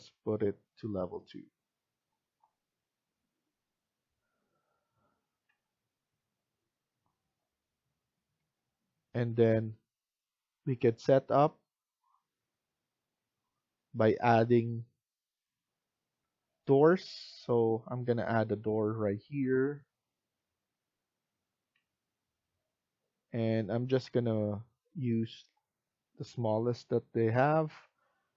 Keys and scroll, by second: 5.4 Escape, 16.1 F1.